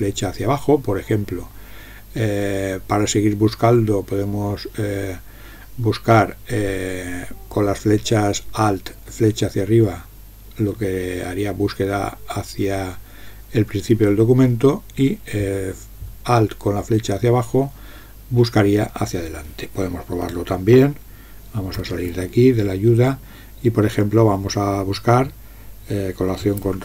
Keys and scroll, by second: 21.8 ctrl+x.